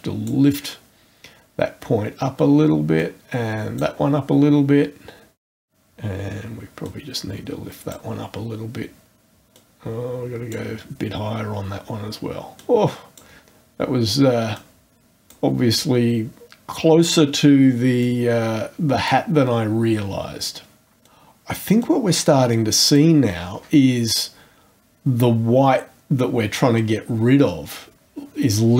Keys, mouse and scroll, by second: 3.0 click, 5.4 click, 6.8-8.1 drag, 9.5 click, 12.6 click, 14.5 click, 18.0-19.3 drag, 21.8-23.2 drag.